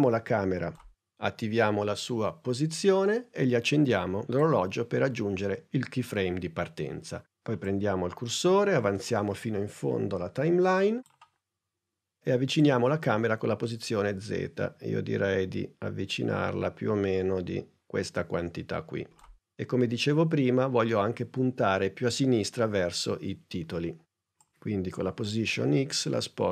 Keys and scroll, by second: 1.4 p.